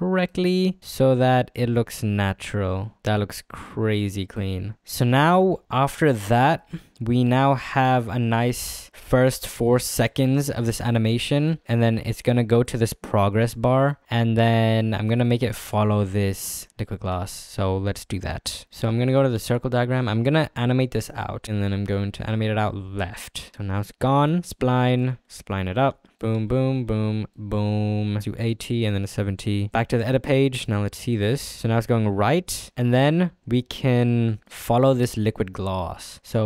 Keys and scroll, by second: 3.0 space, 17.3 z, 26.2 ctrl+f, 26.4 s, 26.7 t.